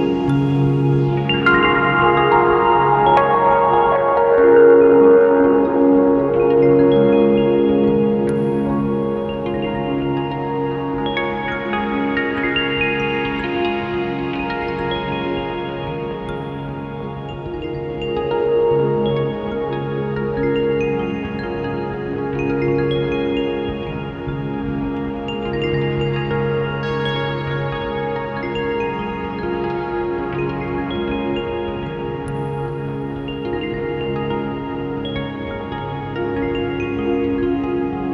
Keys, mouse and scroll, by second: 1.2 click, 2.2-11.2 drag, 14.2-14.7 drag, 20.6 click, 21.2 click, 22.0-26.4 drag, 26.9 Delete, 27.2-29.1 drag, 29.7 ctrl+shift+click, 33.4 ctrl+shift+click, 35.6 ctrl+shift+click, 37.1 ctrl+shift+click.